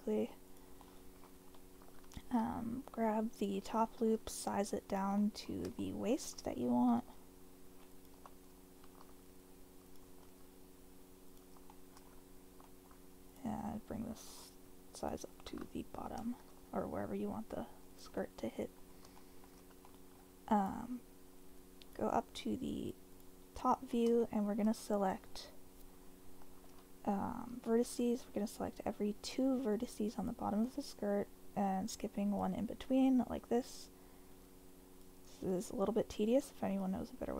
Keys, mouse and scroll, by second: 0.8 middle click, 1.8 2, 3.3 alt+click, 4.0 s, 4.8 click, 5.2 middle click, 5.8 shift+middle click, 5.8 shift+click, 7.0 s, 7.9 click, 8.1 g, 9.0 z, 9.9 click, 10.2 s, 11.3 click, 11.7 shift+middle click, 12.7 shift+click, 15.0 alt+click, 16.0 g, 16.5 z, 17.9 click, 18.2 middle click, 19.3 shift+middle click, 19.9 middle click, 20.6 click, 21.8 click, 23.1 click, 24.2 shift+middle click, 27.5 1, 28.9 click, 29.8 click, 31.6 shift+middle click, 34.5 shift+middle click, 35.8 shift+click.